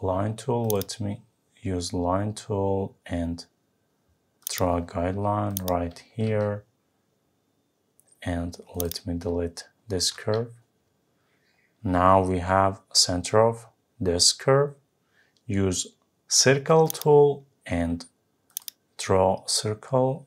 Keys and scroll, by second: 10.1 Delete.